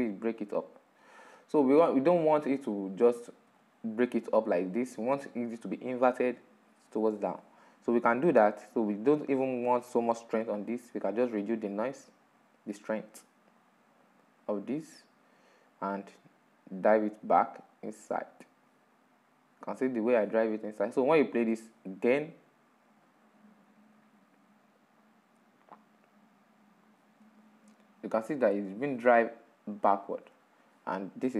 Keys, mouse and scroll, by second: 0.6-1.8 drag, 2.2 click, 3.1-3.7 middle drag, 3.7 scroll up 4, 4.2-5.0 middle drag, 5.0-5.4 scroll down 2, 5.4-9.8 middle drag, 9.8-18.4 drag, 18.4-20.6 middle drag, 20.6-24.2 drag, 26.3-26.8 drag, 26.8-28.2 middle drag, 28.2-28.6 scroll up 3, 28.6-30.1 middle drag, 30.1-31.3 scroll down 1.